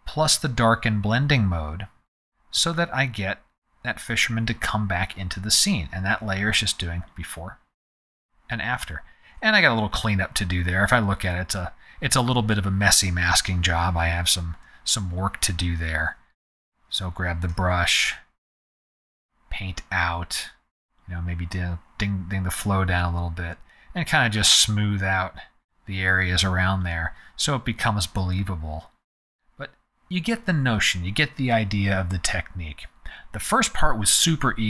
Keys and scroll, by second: 1.8 z, 13.9 space, 17.5 b, 30.2 z.